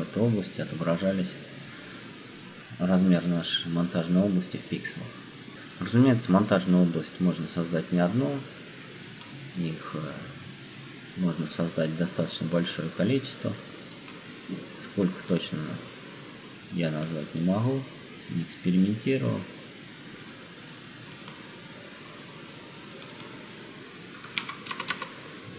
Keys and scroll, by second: 24.1-25.4 typing.